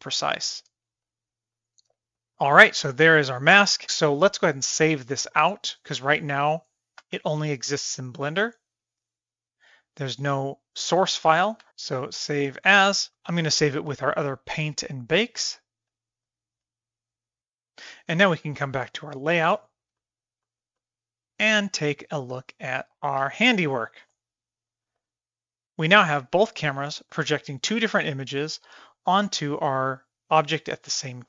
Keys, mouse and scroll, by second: 0.2 middle click, 0.4 shift+middle click, 0.8-2.4 middle drag, 2.5 shift+middle click, 7.0 n, 11.3 Escape, 11.6-13.1 drag, 16.2 click, 19.6 shift+middle click, 20.0 middle click, 20.5 middle click, 20.8-21.3 middle drag, 21.6 click, 22.9 KP_3, 23.2 KP_1, 24.1-24.6 middle drag, 25.0-25.6 middle drag, 25.9-26.3 middle drag, 26.5-26.8 middle drag, 27.1 middle drag, 27.7-28.5 middle drag, 29.2 middle click, 30.7 middle click.